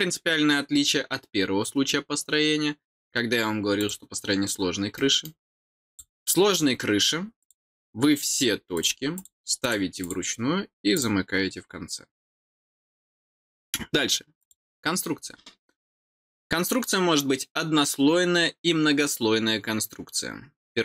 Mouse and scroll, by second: 3.7 click, 4.9 middle click, 5.8 click, 7.3 click, 8.2 click, 8.7 click, 9.1 click, 9.6 click, 10.0 click, 10.9 click.